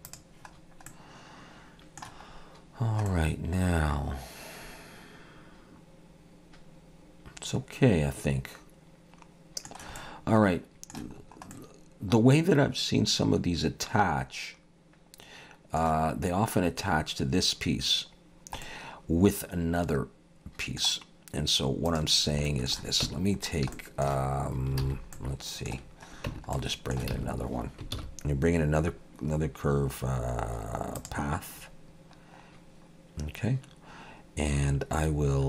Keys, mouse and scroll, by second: 0.1 click, 0.6-0.9 scroll down 2, 0.9 middle click, 2.4-2.8 scroll up 1, 2.8 scroll down 1, 3.1 middle click, 10.0 middle click, 11.2-11.5 scroll up 2, 11.5 middle click, 18.3-18.6 scroll down 1, 18.6 middle click, 21.9 click, 22.5 shift+middle click, 23.1 Tab, 23.4 scroll up 2, 23.7 shift+middle click, 24.8 alt+a, 25.1 middle click, 25.8-26.1 scroll down 2, 26.3 Tab, 26.5 middle click, 27.1 alt+a, 28.0 shift+a, 32.6-33.7 scroll down 1.